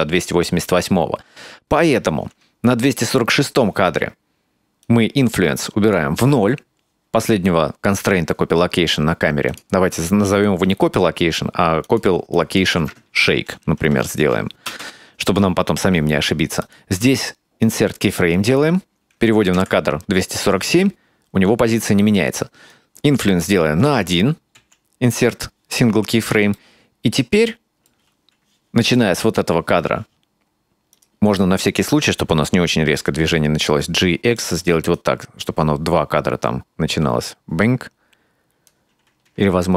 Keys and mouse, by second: 4.9-6.1 drag, 9.6-15.4 drag, 16.7-17.8 right drag, 19.6 Right, 22.6 click, 26.6-28.0 ctrl+middle drag, 30.8 right click, 31.6-32.2 right drag, 33.4 g, 34.9-38.8 drag, 39.3 g.